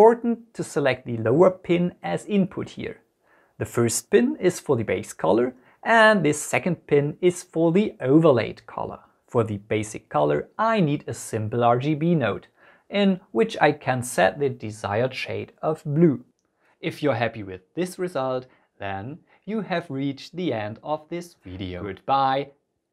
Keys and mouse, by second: 19.3-20.5 drag, 19.7 KP_0, 22.3 n.